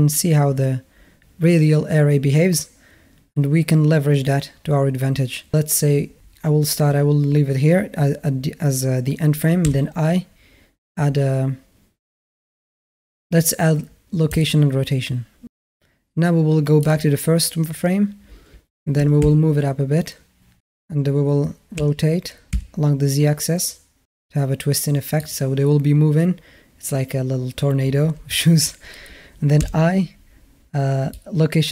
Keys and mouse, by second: 9.4 i, 17.7-18.8 drag, 18.8 g, 21.6 r, 29.4 i.